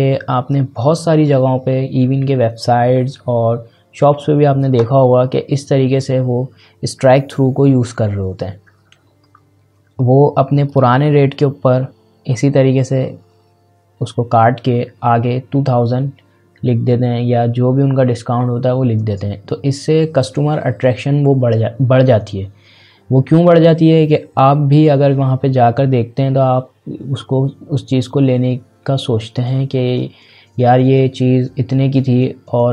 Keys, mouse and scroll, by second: 10.6 click.